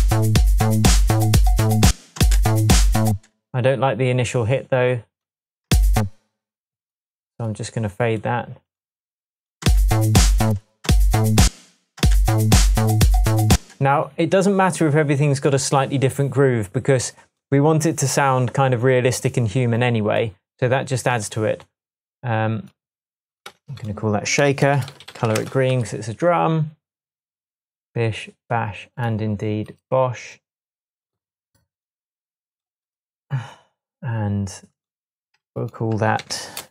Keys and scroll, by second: 1.9 space, 5.7 space, 9.7 space, 13.5 space, 23.5-25.8 typing, 36.2 typing.